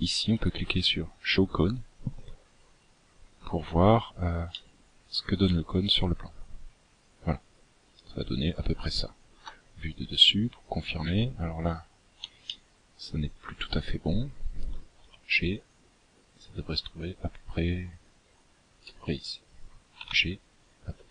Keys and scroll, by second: 7.3 KP_7, 12.8 g, 17.8 g.